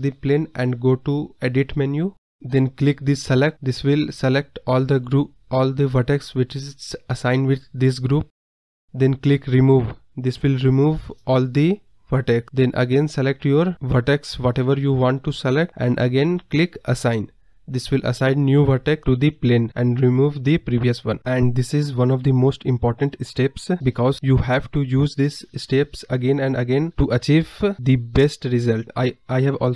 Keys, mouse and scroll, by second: 1.0-2.1 scroll down 11, 1.0 middle drag, 1.5-1.9 middle drag, 4.0-4.8 scroll down 5, 4.8 KP_Decimal, 5.4 scroll up 3, 5.7-7.3 middle drag, 7.3 click, 9.1 click, 9.8-10.7 scroll up 4, 10.7-14.9 drag.